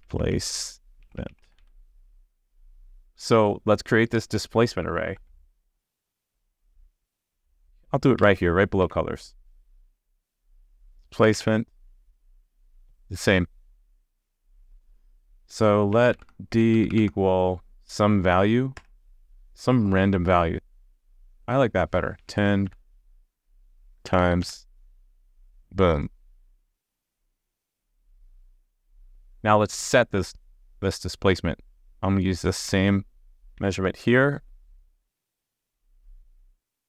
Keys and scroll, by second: 5.1 super+c, 11.3 super+v, 36.5 super+c.